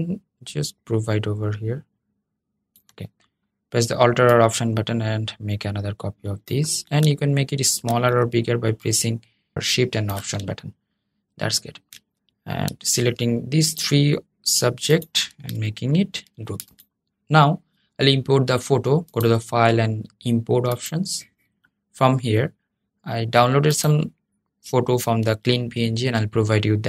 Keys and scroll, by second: 16.0 super+g.